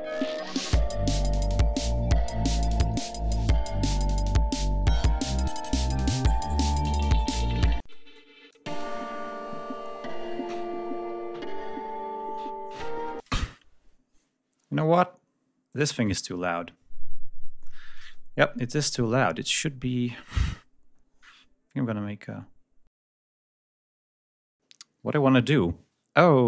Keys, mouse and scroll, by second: 1.5-2.9 drag, 3.2 click, 3.8-5.1 drag, 5.9 click, 7.6 space, 7.9 click, 8.5 space, 11.3-12.6 scroll up 6, 13.0 space, 13.2-14.2 scroll up 2, 14.4 scroll down 1, 14.7 scroll up 1, 15.5 click, 16.0 scroll up 1, 25.8 scroll down 2, 26.0-26.4 scroll up 2.